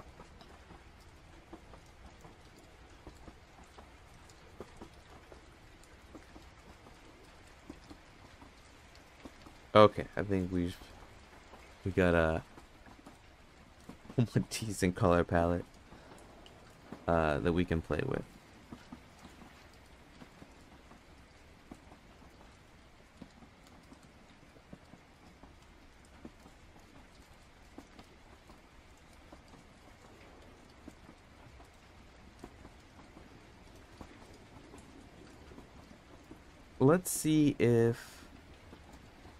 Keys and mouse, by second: 0.9 click, 2.3 click, 2.6 click, 3.4 click, 7.9 click, 23.8 click, 25.2-26.4 drag, 27.3 KP_Subtract, 27.4 KP_Subtract, 27.6 KP_Subtract, 28.4 KP_Add, 31.6 click.